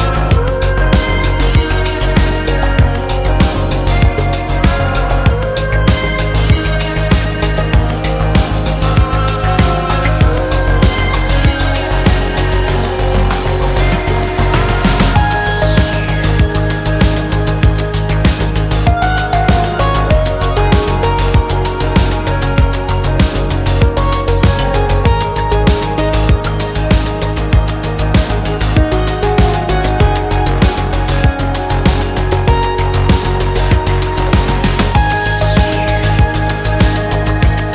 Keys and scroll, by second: 11.8 b, 13.8 x, 19.8 ctrl+alt+z, 22.9 ctrl+g, 29.6 F2.